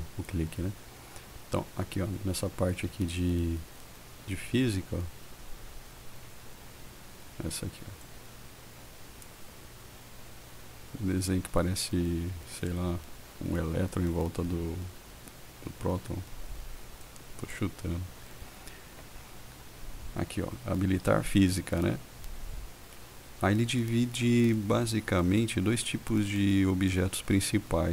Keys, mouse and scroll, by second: 0.1 click, 8.3 click, 17.3 click.